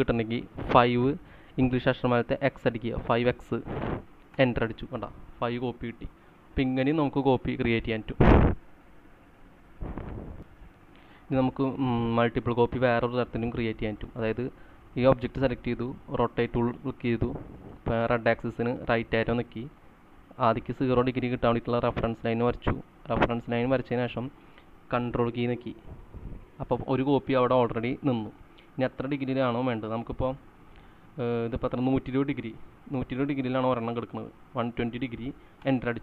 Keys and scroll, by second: 0.8 5, 2.8 x, 4.4 Return, 10.6 c, 18.8 Right, 34.0-36.0 typing.